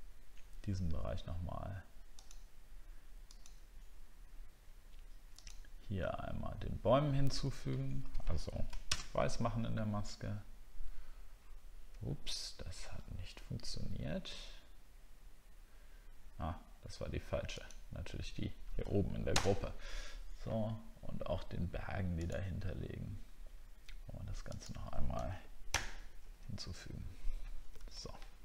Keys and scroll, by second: 8.9 ctrl+BackSpace, 12.8 alt+scroll down 1, 19.3 ctrl+BackSpace.